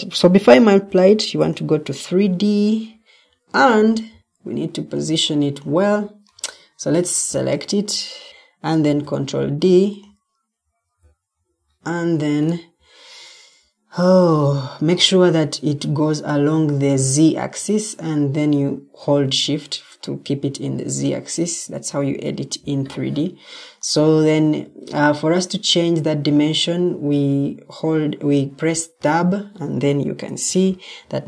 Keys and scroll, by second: 6.5 Escape, 8.7 ctrl+d, 14.9 Escape.